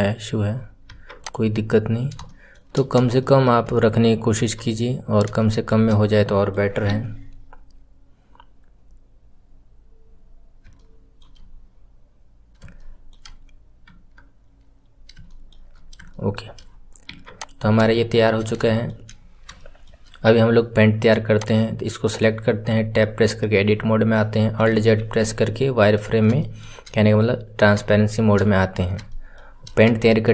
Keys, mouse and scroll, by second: 1.1 click, 1.4 scroll down 2, 2.2 shift+middle click, 2.7 scroll down 2, 3.1-4.3 shift+middle drag, 4.3 Tab, 5.3-6.8 shift+middle drag, 6.8 KP_3, 8.7-9.9 scroll down 1, 9.9 scroll up 5, 10.7-11.4 shift+middle drag, 11.4-12.7 scroll up 4, 12.7-13.8 shift+middle drag, 13.8 KP_1, 14.7-15.2 scroll down 1, 15.2 shift+middle click, 15.7-16.1 scroll down 2, 16.1-17.1 shift+middle drag, 17.1 Tab, 17.3 click, 17.6 scroll down 2, 17.9-19.2 shift+middle drag, 19.2-19.5 scroll up 2, 19.5-21.3 shift+middle drag, 21.3 click, 26.3-28.7 shift+middle drag, 28.7-29.0 scroll up 1, 29.0-30.3 shift+middle drag.